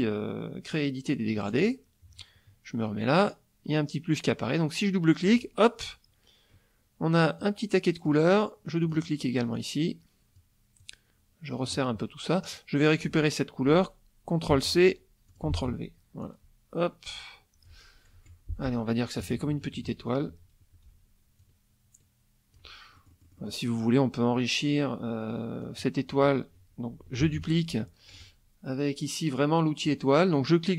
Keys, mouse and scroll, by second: 1.5 click, 5.2 click, 7.4 click, 8.8 click, 9.5 click, 10.8 click, 12.4 click, 14.5 ctrl+c, 15.3 ctrl+click, 15.5 ctrl+v, 16.2-17.8 drag, 18.1 F1, 19.2 KP_Subtract, 21.4-22.7 ctrl+drag, 23.0 ctrl+middle click, 25.6-26.3 drag, 27.2 ctrl+d, 27.5-28.3 ctrl+drag, 29.8 click.